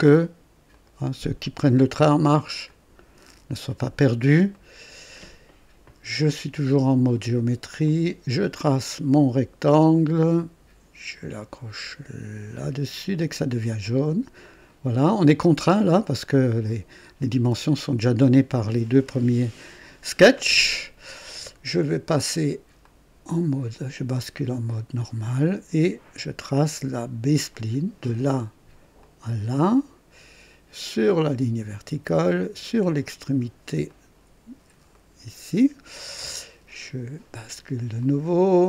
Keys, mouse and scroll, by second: 0.7 click, 2.6 click, 4.0-4.3 scroll up 1, 4.5 right click, 7.8 click, 9.7 click, 13.3 click, 14.4 right click, 22.8 click, 24.9 click, 27.5 click, 28.9 click, 30.8 click, 33.8 click, 34.9 right click, 37.9 click.